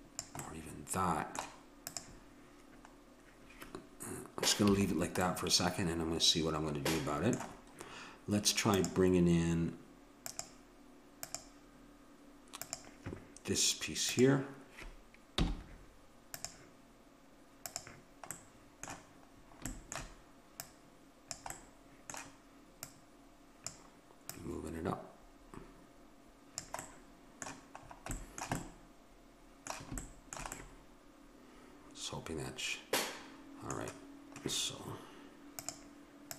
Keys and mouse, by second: 0.5 middle click, 1.8-3.6 right drag, 4.7 a, 5.4-7.0 middle drag, 8.7-16.0 drag, 15.4 m, 17.6-19.5 drag, 19.5-20.6 middle drag, 20.6-22.5 drag, 22.4-23.6 middle drag, 22.8-26.3 drag, 26.8-32.3 middle drag.